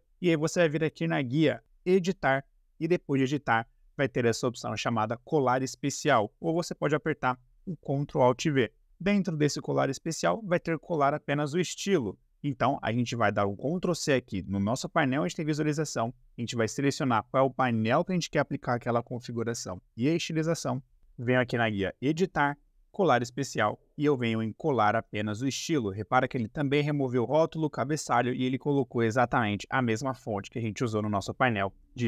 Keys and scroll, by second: 13.6 ctrl+c.